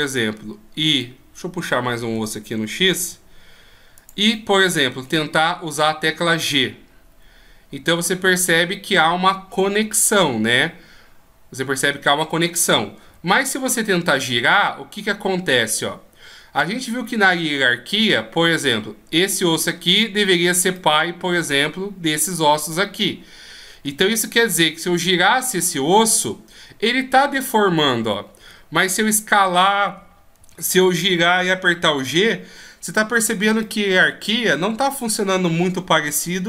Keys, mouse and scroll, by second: 0.8 right click, 2.1 e, 4.2 middle click, 5.6 right click, 6.5 g, 13.0 r, 20.6 middle click, 22.9 middle click, 24.8 r, 28.9 s, 30.3 r, 33.5 middle click.